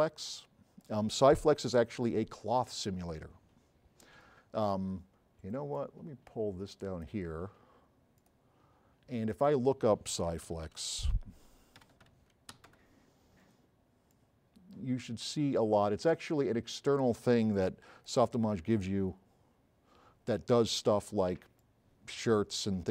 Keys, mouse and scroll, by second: 1.1 middle click, 1.6-2.8 right drag, 5.8 click, 6.2 click, 6.3 click, 10.3-13.2 typing, 21.6-22.9 drag.